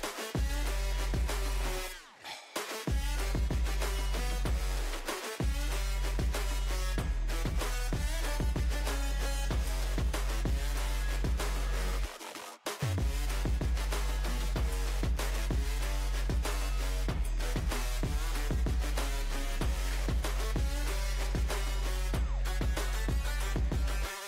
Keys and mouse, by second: 1.2-4.6 right drag, 5.9 ctrl+r, 8.6-13.5 drag, 11.6 middle click, 11.6 right click, 13.5-15.9 right drag, 13.8 Tab, 16.4 KP_1, 17.1 ctrl+KP_1, 19.3 KP_1, 23.1 KP_1.